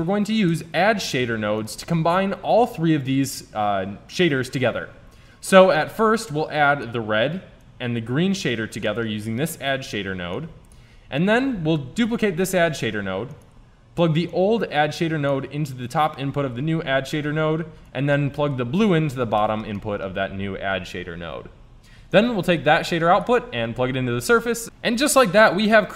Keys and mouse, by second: 5.8-9.1 drag, 10.6 click, 12.0 shift+d, 17.9-19.6 drag, 19.8-21.8 drag, 22.1-24.0 drag, 24.7 click.